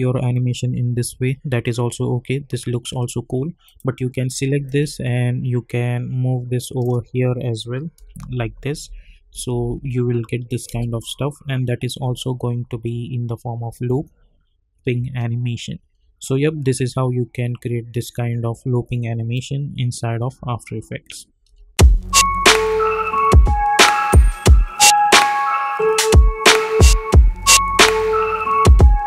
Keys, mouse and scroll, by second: 3.6-7.9 drag, 7.9 Right, 9.3 Left, 10.5 click, 10.7 space, 21.4 space.